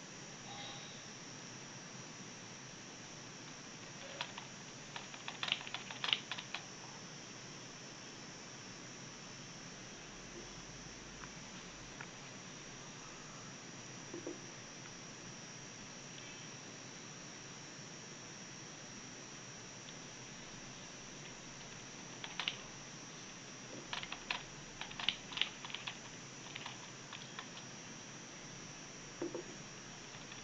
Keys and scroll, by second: 29.5 w.